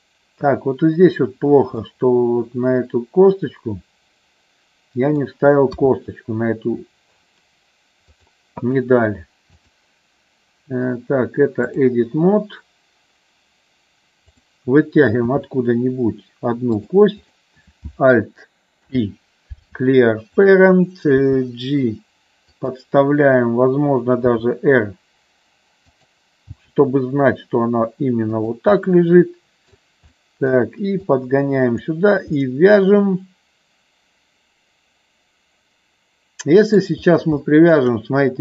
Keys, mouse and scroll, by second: 1.8-5.2 middle drag, 5.8 KP_3, 8.0 click, 9.5-11.9 drag, 15.3 e, 17.3 click, 18.8 alt+p, 21.2 g, 24.3 r, 25.8 click, 26.5 g, 28.3 click, 28.8 middle click, 30.1 middle click, 31.1 click, 32.4-36.8 middle drag, 37.3 shift+middle click.